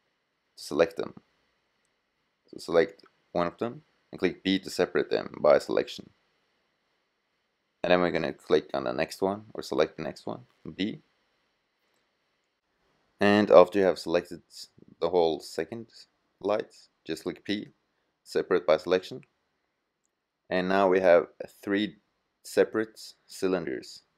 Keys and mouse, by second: 3.8 p, 9.2 b, 13.1 b, 16.2 p, 16.9-18.3 drag, 23.9 click.